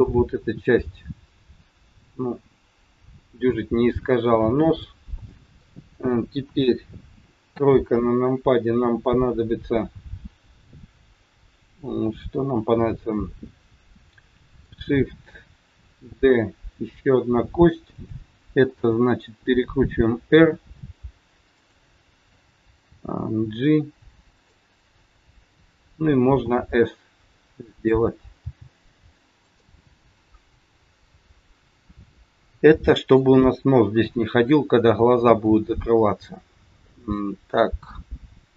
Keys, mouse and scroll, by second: 0.3-0.7 scroll up 3, 4.7 middle click, 6.4 KP_1, 7.5 KP_3, 7.9-8.6 scroll down 4, 16.1 shift+d, 19.5 r, 22.9 g, 26.4 s, 28.4 g, 29.9 middle click, 31.2 middle click, 35.6 middle click.